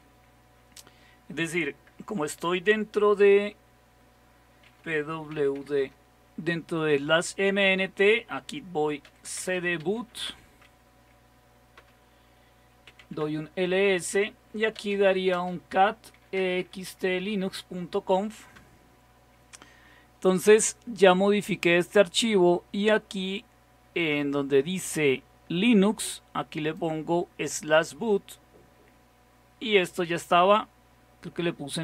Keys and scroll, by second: 4.7-5.6 typing, 5.9 Return, 8.9-10.5 typing, 11.8-13.6 typing, 14.6-17.2 typing, 18.6 typing, 19.7-20.5 typing.